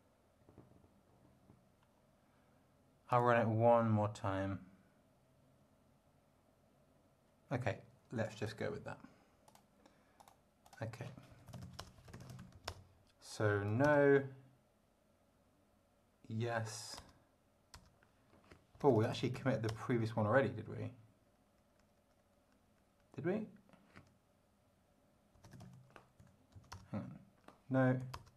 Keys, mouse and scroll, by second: 3.1 click, 8.2 click, 9.5 click, 10.2 click, 10.6 click, 11.0-13.7 typing, 13.8 Return, 16.5 y, 17.0 Return, 17.7 Return, 18.5-19.8 typing, 25.1-26.2 typing, 26.5 Right, 26.7 Return, 28.0-28.3 typing, 28.1 Return.